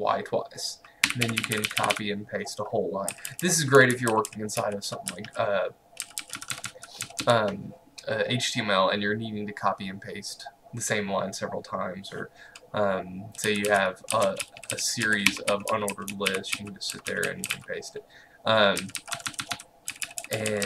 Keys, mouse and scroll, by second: 1.1-7.8 typing, 13.3-20.6 typing.